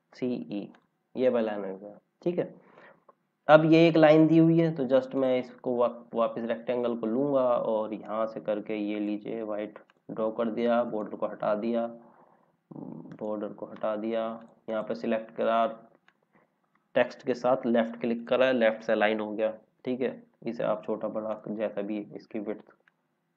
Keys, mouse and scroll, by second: 0.0-0.5 typing, 1.3 scroll down 1, 3.5 scroll up 1, 5.1 click, 5.5-6.3 scroll down 1, 7.3-7.6 scroll up 1, 8.0 click, 10.8 right click, 13.0 right click, 14.3 click, 17.4 l, 18.1 click, 18.6 scroll down 1, 20.2 scroll up 1.